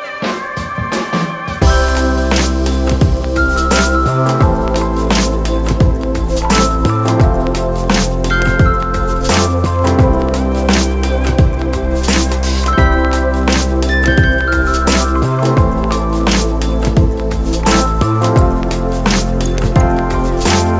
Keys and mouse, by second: 3.3 shift+click, 6.8 shift+right click, 8.2 shift+click, 9.1-15.1 shift+drag, 15.1-16.8 shift+drag, 16.8-20.3 shift+drag.